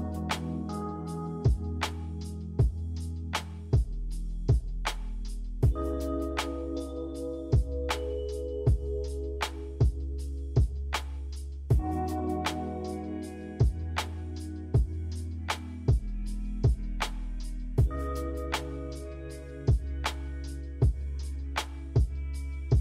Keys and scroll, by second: 5.9 b, 8.2-9.2 typing, 15.4 g, 18.2 v.